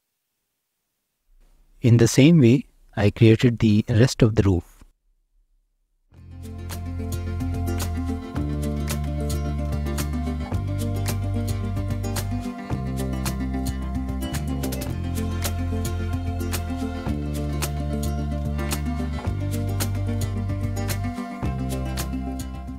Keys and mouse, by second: 0.5 click, 1.1 shift+d, 1.2 r, 1.5 z, 3.3 g, 4.0 click, 4.5-4.9 middle drag, 5.2 shift+d, 5.2 middle click, 5.7 g, 6.3 click, 7.4 click, 7.9 shift+d, 8.1 click, 8.6 g, 9.7 middle click, 10.1 shift+middle click, 10.4 click, 10.5 middle click, 10.8 click, 11.0 Tab, 11.1 middle click, 11.3 Tab, 11.6 s, 11.9 x, 12.4 z, 12.5 z, 14.2 click, 15.0 shift+middle drag, 16.1 s, 16.2 z, 17.6 click, 18.7 click, 19.0-19.6 middle drag, 19.8 shift+a, 20.3 r, 20.4 x, 20.6 y, 21.4 alt+middle click, 21.8 shift+middle click, 22.2 ctrl+., 22.5 g.